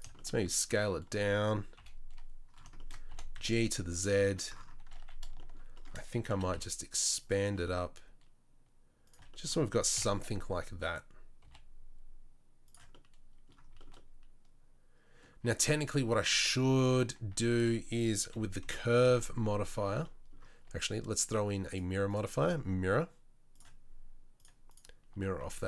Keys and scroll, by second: 1.7 KP_3, 3.1 g, 6.3 s, 7.4 g, 9.9 KP_7, 11.4 g, 15.5 Tab, 17.0 Tab, 17.3 Tab, 18.3 KP_3, 18.6 KP_1, 19.0 KP_3, 25.4 Tab.